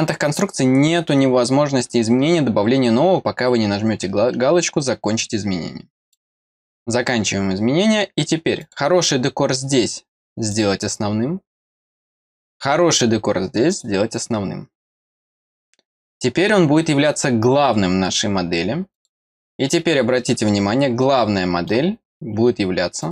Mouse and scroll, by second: 6.1 click, 8.6 click, 10.5 click, 12.3 click, 13.7 click, 18.9 click, 21.0 middle click, 23.0 click.